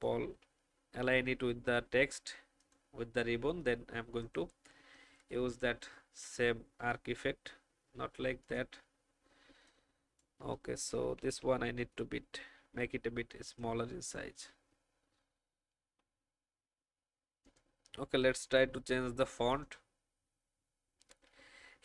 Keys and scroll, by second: 11.1 alt+shift+Down, 11.7 Down, 15.6 alt+shift+Up.